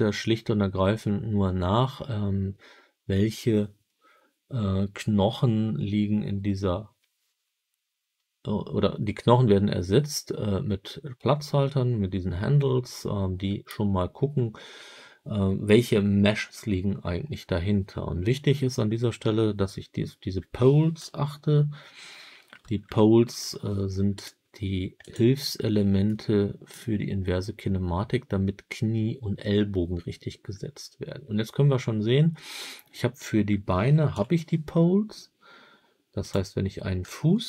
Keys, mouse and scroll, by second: 20.9 KP_1, 22.5 KP_7, 24.0-25.1 right drag, 25.4-26.0 middle drag, 34.0 KP_3, 36.1 click.